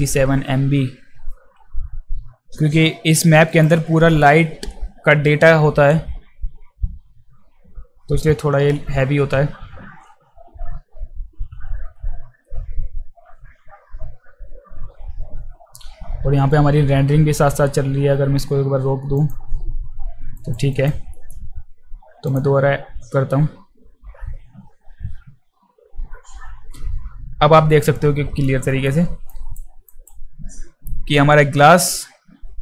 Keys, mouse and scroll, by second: 3.5 click, 19.2 click, 20.4 alt+right click, 20.7 alt+click, 21.1 alt+middle click, 22.2 click, 28.4 alt+middle click, 29.3 alt+right click, 29.9 alt+right click.